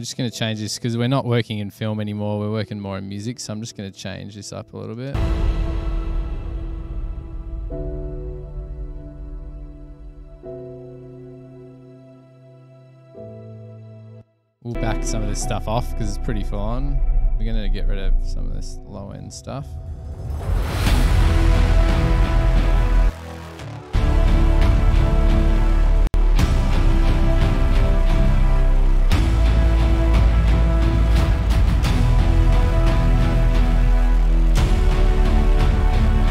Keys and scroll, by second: 5.3 space, 13.5 super+-, 14.6 super+=, 20.9 super+=.